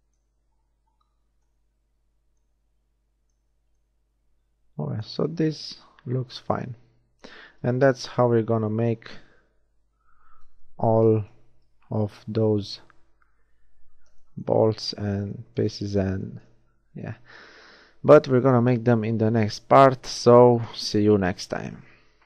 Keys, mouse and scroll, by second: 3.6 Tab, 7.9 KP_1, 9.9 Tab, 11.9 z, 15.4 middle click, 16.6 middle click, 16.8 middle click.